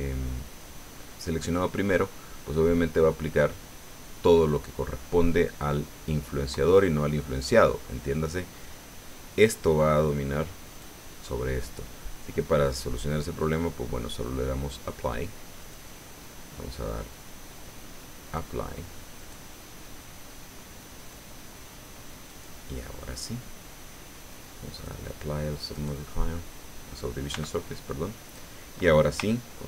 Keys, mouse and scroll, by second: 10.7 right click, 11.6 middle click, 13.4 click, 15.6 right click, 18.2 click, 19.2 right click, 21.0 right click, 22.3 right click, 24.7 click, 25.7 right click, 27.3 b, 27.5-28.5 drag.